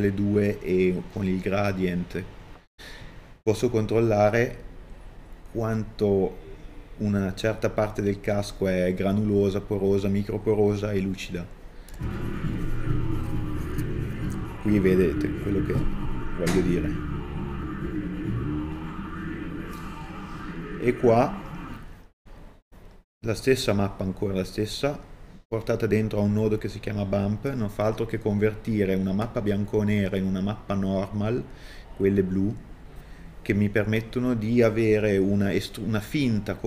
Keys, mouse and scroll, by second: 16.3 scroll down 2, 16.5 middle click, 17.5 scroll down 2, 17.7 middle click, 18.3 scroll up 1, 19.4 click, 19.7 shift+d, 21.4 click.